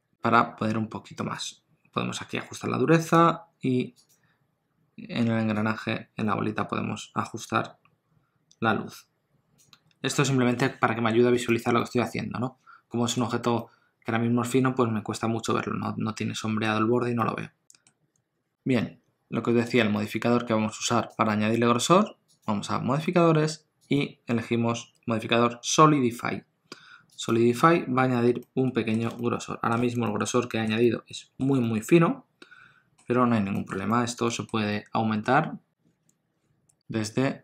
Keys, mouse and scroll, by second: 11.3 click, 11.8 middle click, 13.6 middle click, 17.2 middle click, 19.7 click, 22.4 click, 23.9 click, 28.4 middle click, 29.2 ctrl+middle click, 30.0 shift+middle click, 30.5 middle click, 30.8 ctrl+middle click, 31.6 middle click, 33.5 middle click, 33.9 ctrl+middle click.